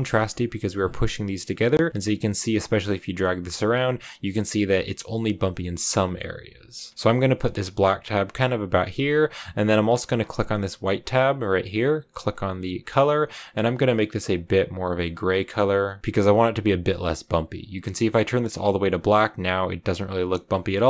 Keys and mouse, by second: 0.1-6.7 drag, 6.9 click.